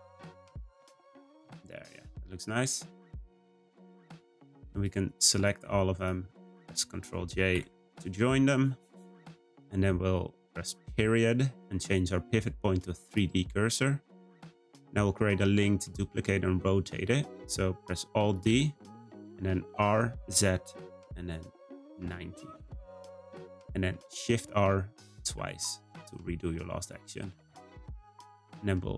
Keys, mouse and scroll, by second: 1.2 click, 1.5-2.0 scroll down 3, 2.0-3.5 middle drag, 3.5-3.8 scroll up 2, 3.8 shift+middle click, 4.7 click, 5.3 shift+click, 6.0 shift+click, 6.4 shift+click, 7.6 ctrl+j, 8.6-10.9 shift+middle drag, 10.9 ., 14.1-17.1 middle drag, 18.3-21.4 right drag, 24.5 shift+r, 25.2 shift+r, 25.8-28.9 middle drag.